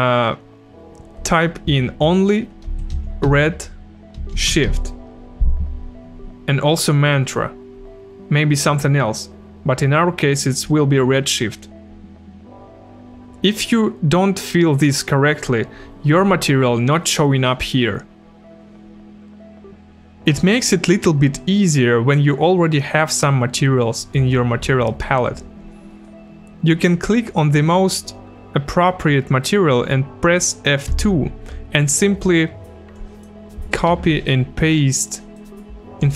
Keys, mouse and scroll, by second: 2.4-5.2 typing, 30.9 F2, 32.9 click, 33.9 ctrl+c, 35.0 click.